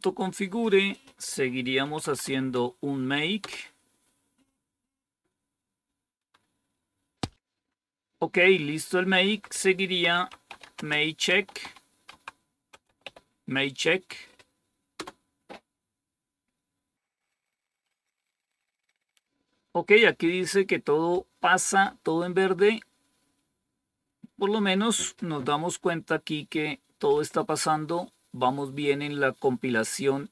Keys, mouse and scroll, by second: 0.8 click, 1.5-2.7 typing, 3.3 Return, 7.6 Up, 9.1 Down, 9.8-13.4 typing, 14.9 Return.